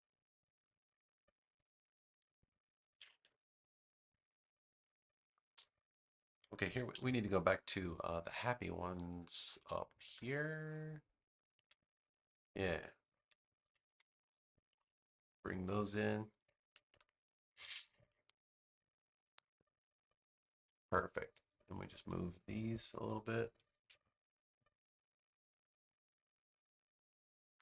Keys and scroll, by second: 2.8 super+c, 3.0 super+v, 6.8 BackSpace, 7.8 space, 13.5 super+c, 13.9 space, 17.9 super+v, 23.6 super+z.